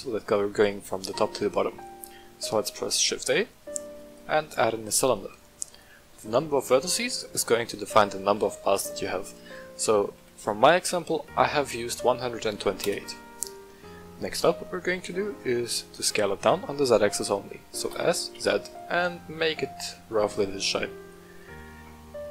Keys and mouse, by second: 2.1 shift+a, 5.7 click, 7.3-13.6 drag, 14.8 middle click, 17.9 s, 18.3 z, 20.2 click, 20.6 middle click, 21.5 Tab.